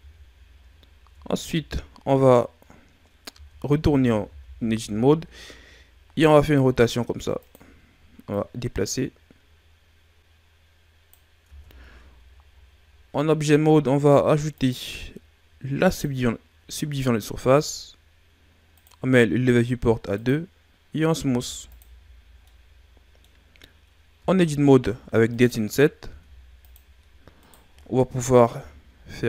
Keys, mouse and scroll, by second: 0.5-1.0 scroll up 1, 1.0 Tab, 2.7-3.3 scroll down 2, 3.3 Tab, 3.7 a, 4.2 a, 6.1 r, 8.2 click, 11.4 Tab, 12.0-14.5 ctrl+scroll up 1, 14.5 click, 18.7 click, 21.2 w, 22.4 middle click, 23.3 scroll up 3, 24.1 Tab, 24.6 middle click, 24.9-25.3 scroll up 1, 25.3 right click, 26.0 ctrl+Tab, 27.3 right click, 28.5 i.